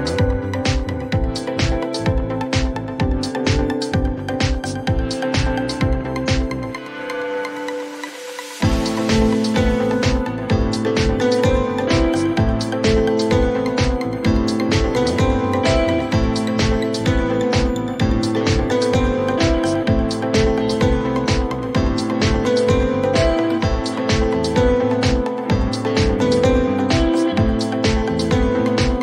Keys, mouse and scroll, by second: 0.6 typing, 1.3 click, 1.7-3.5 typing, 2.4-4.6 drag, 5.3 click, 5.7-6.8 typing, 13.3 click, 15.1-18.4 drag, 20.3 click, 22.5 click, 25.7 click.